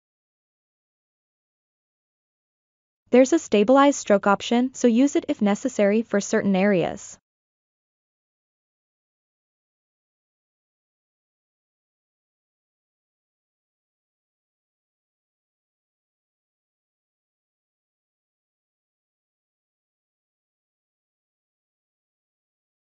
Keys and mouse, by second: 4.0 click, 4.7 click, 9.8-22.8 drag.